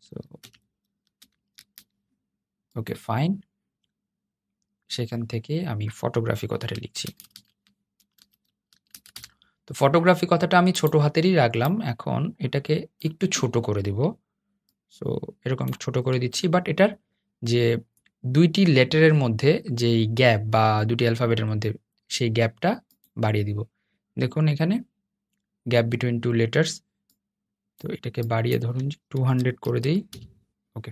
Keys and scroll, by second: 0.1 super+F12.